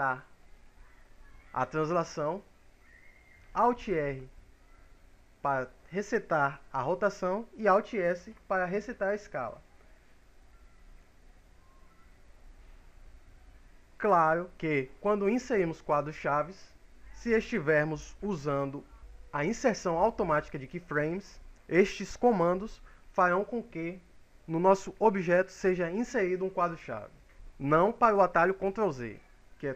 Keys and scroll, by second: 3.5 alt+r, 7.7 alt+s.